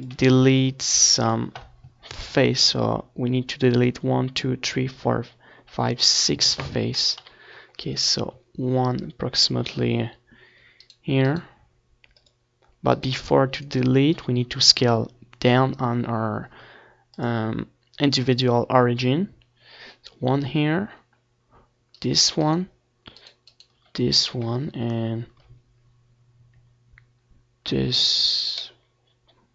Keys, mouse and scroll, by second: 0.9-2.7 drag, 5.4-8.8 right drag, 11.6 middle click, 12.3-14.1 middle drag, 18.2-26.7 middle drag, 26.7 e, 27.1-28.9 right drag, 27.9 s.